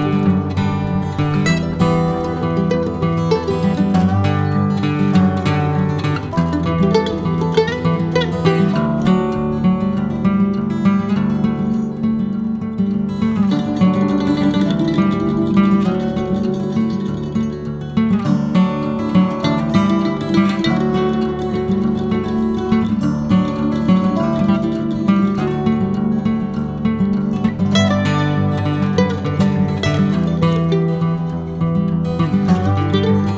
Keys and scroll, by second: 2.2-5.0 typing, 4.5 ctrl+c, 6.7 ctrl+v, 7.3-8.4 typing, 12.4-13.4 typing, 15.2 Escape, 15.2 Escape, 15.3 Escape, 15.7 e, 15.9 Escape, 15.9 space, 16.0 Escape, 16.5 Escape, 19.0-20.0 typing, 20.7 Escape, 21.2 Escape, 21.3 Escape, 22.7 Escape, 22.8 Escape, 22.9 Escape, 27.2-27.5 typing, 28.9 Escape, 29.7 Escape, 30.0 typing, 31.0 Escape, 31.5-33.3 typing.